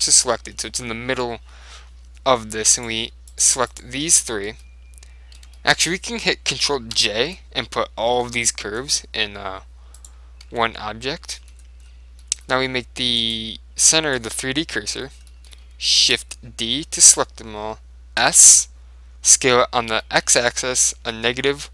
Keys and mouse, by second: 0.7-2.4 middle drag, 2.8-5.4 right drag, 4.2-7.6 middle drag, 7.1 ctrl+j, 8.2 Tab, 8.4-10.3 middle drag, 10.1-11.8 right drag, 10.6 Tab, 11.4 middle click, 12.3 middle click, 13.3 click, 14.8-17.1 middle drag, 16.1 shift+d, 18.3 s.